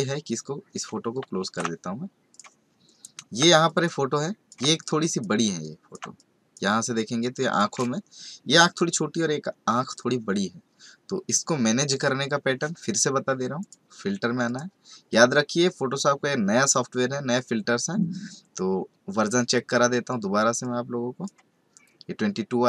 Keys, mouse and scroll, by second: 0.8 ctrl+Num_Lock, 1.4 ctrl+w, 2.3 click, 3.6 ctrl+click, 5.6 ctrl+click, 6.9 click, 13.6 click, 14.4 click, 20.6 click.